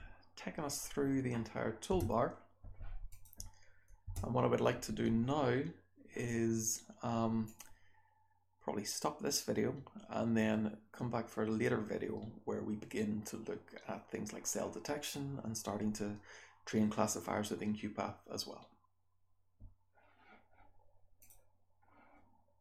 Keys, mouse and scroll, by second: 1.8 BackSpace, 3.0 click, 4.0 BackSpace, 7.4 click.